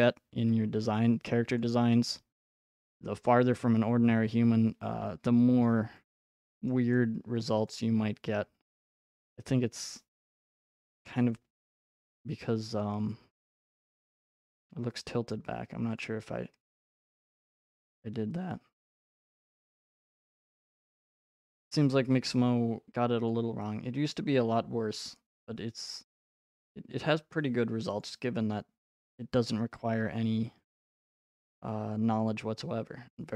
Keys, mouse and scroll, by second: 1.6-5.6 drag, 6.7 scroll, 7.5 right click, 9.3 right click, 15.3 click, 16.0 click, 18.9-19.7 scroll, 19.7 click, 21.6 right click, 23.3 click, 23.7 middle click, 23.9 middle click, 25.4 scroll, 26.0 click, 28.0 click, 31.1-31.8 scroll, 33.0-33.3 scroll.